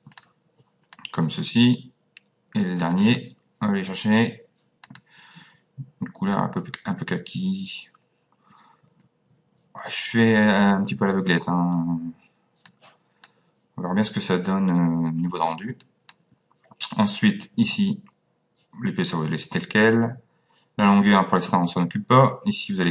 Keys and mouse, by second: 0.9 click, 2.8 click, 4.9 click, 6.3 click, 11.1 click, 12.7 click, 15.8 click.